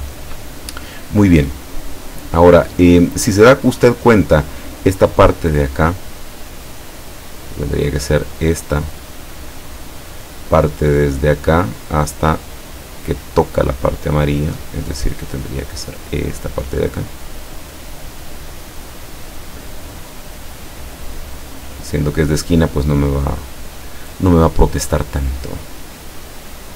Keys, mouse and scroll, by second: 6.8 click, 14.0 click, 15.7-17.4 drag, 19.5-21.6 drag.